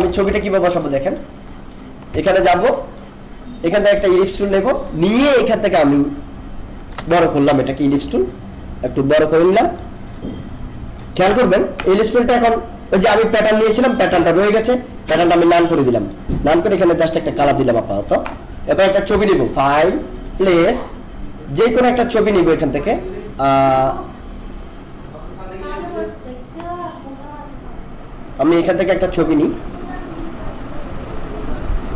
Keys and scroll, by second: 2.3 ctrl+-.